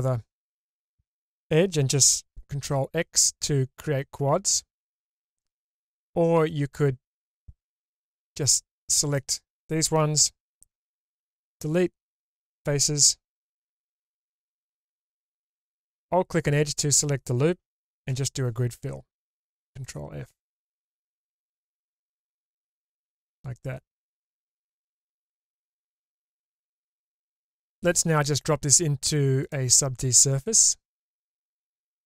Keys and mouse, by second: 2.5 ctrl+x, 4.3 ctrl+z, 6.3 3, 7.9 alt+z, 8.5-9.2 drag, 11.1 Delete, 13.3 2, 14.7 alt+click, 18.1 q, 21.6-22.3 middle drag, 22.9-25.6 middle drag, 25.6 click, 25.6 right click, 26.5-27.5 middle drag, 29.5-31.6 drag.